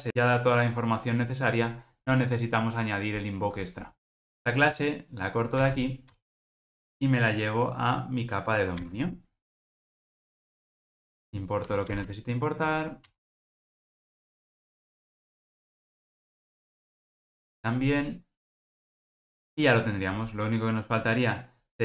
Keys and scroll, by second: 5.6 super+x, 8.8 super+x, 8.9 super+v, 10.9 super+v, 14.5 alt+Return, 14.6 alt+super+[, 16.5 alt+Return, 19.0 ctrl+alt+o.